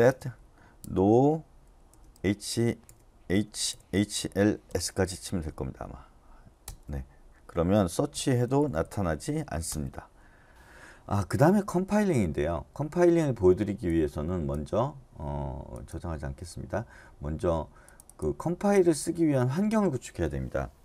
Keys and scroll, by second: 1.6-3.8 typing, 6.6 Return, 8.1-8.8 typing, 9.7 Return.